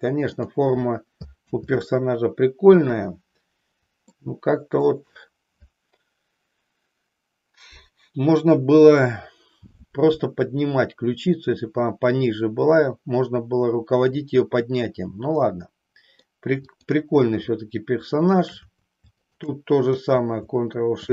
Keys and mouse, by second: 0.4 click, 1.6 ctrl+z, 2.9 KP_3, 4.1 shift+middle click, 15.4 middle click, 16.8-18.2 drag, 19.2-20.2 shift+drag.